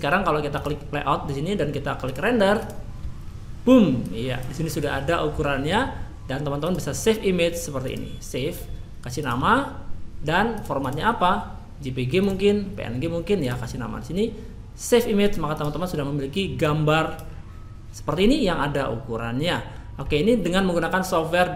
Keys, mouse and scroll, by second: 0.5 click, 2.0 click.